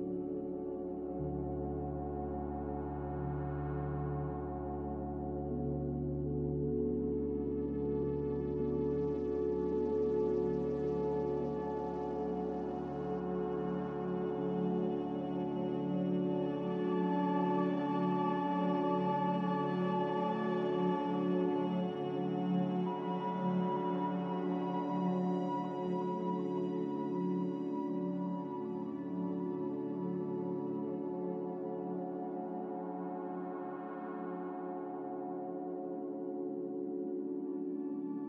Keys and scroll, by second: 8.6 x, 10.0-10.9 typing, 12.8 z, 14.2 m, 32.4 x, 34.7 n, 35.8 m.